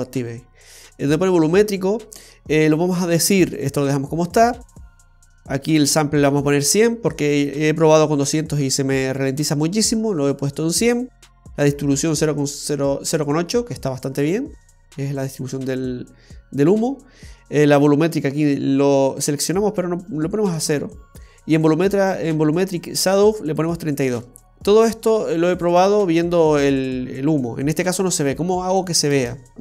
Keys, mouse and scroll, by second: 4.7-5.5 scroll down 2, 29.3 space, 29.5 click, 29.5 scroll up 2.